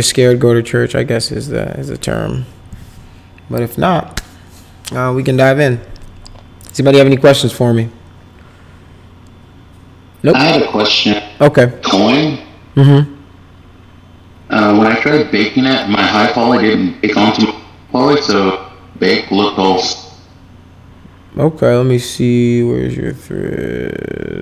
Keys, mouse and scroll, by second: 6.6 click.